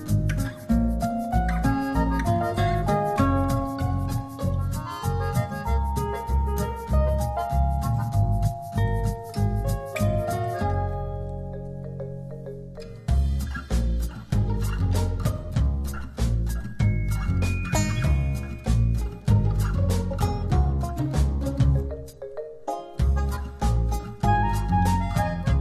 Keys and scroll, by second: 4.8 shift+Up, 11.1 ], 16.5 [, 21.8 [.